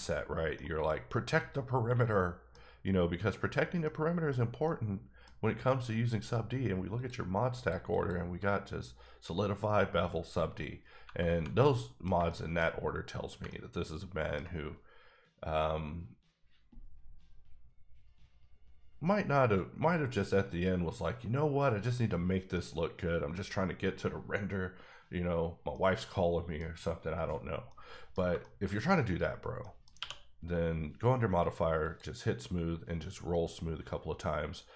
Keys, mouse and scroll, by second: 0.5 middle click, 3.8 middle click, 4.7 middle click, 6.9 click, 7.5 click, 10.3 click, 11.6 middle click, 12.6 scroll up 2, 13.4 ctrl+middle click, 22.2 middle click, 22.3 scroll down 2, 22.5 middle click, 23.3 scroll down 1, 23.5 middle click, 25.7 middle click, 27.8 middle click, 28.4 shift+middle click, 28.6 middle click, 28.7 scroll down 1, 29.6 middle click, 29.9 q, 31.8 click, 32.4-34.7 scroll up 10.